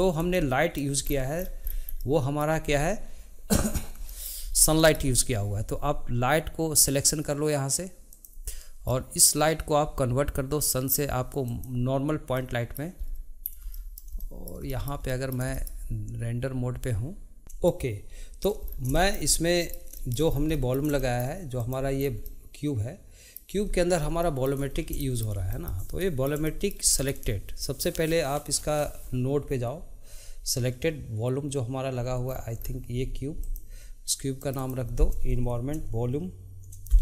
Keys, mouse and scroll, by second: 0.3-1.1 shift+middle drag, 1.1-2.0 scroll down 1, 2.0-2.7 middle drag, 2.7 scroll up 1, 4.1-4.5 shift+middle drag, 4.5 scroll up 1, 4.7-8.1 shift+middle drag, 8.1 click, 8.9-11.4 middle drag, 11.4 click, 12.4-13.0 middle drag, 13.0-13.4 scroll up 4, 13.7-17.4 shift+middle drag, 17.8-18.8 middle drag, 18.8 scroll down 2, 19.1-20.5 shift+middle drag, 20.5 scroll down 1, 20.7-21.7 middle drag, 21.7 click, 22.1-22.5 scroll down 1, 22.5-23.7 middle drag, 23.7-24.1 scroll up 4, 24.3-24.8 shift+middle drag, 24.8-25.1 scroll up 1, 25.1-30.2 shift+middle drag, 32.4 scroll down 2, 33.6 click, 34.5 click, 34.7-37.0 drag.